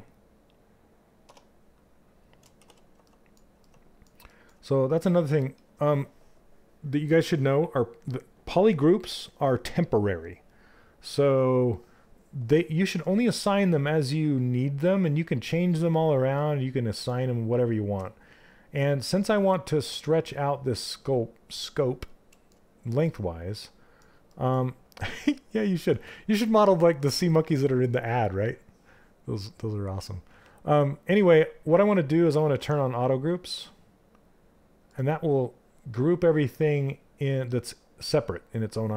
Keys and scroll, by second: 17.5 q, 32.1 2.